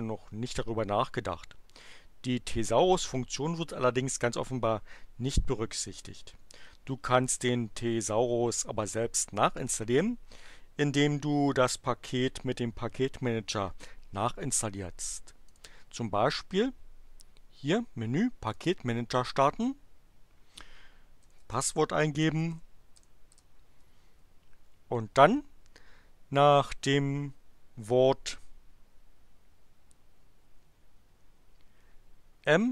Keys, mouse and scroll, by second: 15.5 click, 18.4 click, 21.1-22.9 typing, 32.5-32.7 typing.